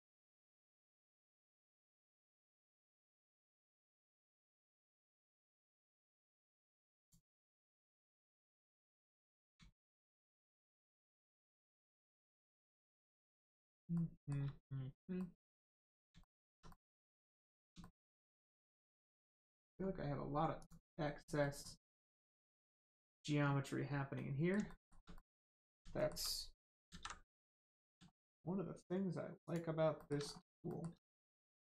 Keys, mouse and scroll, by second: 0.0 middle click, 1.2 shift+middle click, 2.4 middle click, 2.4 middle click, 3.2 shift+middle click, 3.5-3.8 scroll up 1, 4.2-4.7 scroll up 1, 4.8 shift+middle click, 5.2 scroll down 1, 5.6 middle click, 7.0 click, 7.3 middle click, 9.8 shift+middle click, 11.1 middle click, 11.2 middle click, 12.3-13.2 scroll down 1, 13.9 shift+middle click, 15.1 middle click, 15.2 middle click, 16.2 shift+middle click, 16.6 middle click, 16.7 middle click, 17.8 shift+middle click, 18.4 middle click, 18.4 middle click, 19.0 shift+middle click, 19.3 scroll up 1, 19.7 scroll down 1, 20.6 click, 20.8 scroll down 1, 21.4 middle click, 22.4 shift+middle click, 22.8 scroll up 1, 24.1 middle click, 24.6 shift+middle click, 25.1 middle click, 25.2 middle click, 25.9 shift+middle click, 26.8 alt+middle click, 26.9 alt+z, 27.2 middle click, 28.1 shift+middle click, 29.4 middle click, 29.9 shift+middle click, 30.2 scroll up 1, 30.7 shift+middle click, 30.9 scroll up 1, 31.4 shift+middle click.